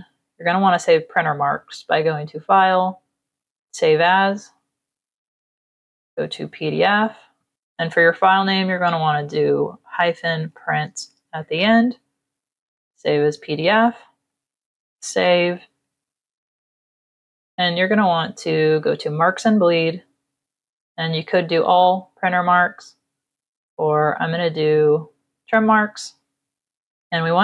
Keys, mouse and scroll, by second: 3.1 click, 4.3 click, 4.9 click, 6.7 click, 7.5 BackSpace, 10.1-11.2 typing, 14.0 click, 18.5 click, 20.8 click, 22.6 click, 24.6 click.